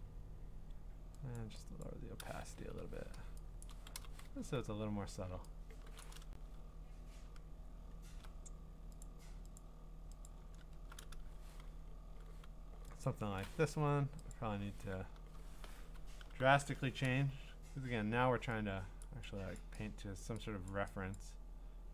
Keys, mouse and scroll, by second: 1.4 click, 1.7 click, 1.9 click, 2.6 Escape, 2.8 Escape, 3.6 click, 4.0-4.4 typing, 6.0 click, 6.4-7.2 scroll, 7.6 scroll, 9.0 click, 9.6 click, 10.2 click, 13.0 click, 13.7 Escape, 14.3 click, 16.3 ctrl+u, 19.0 click, 19.6 click, 20.2 click, 20.7 click, 21.2 click.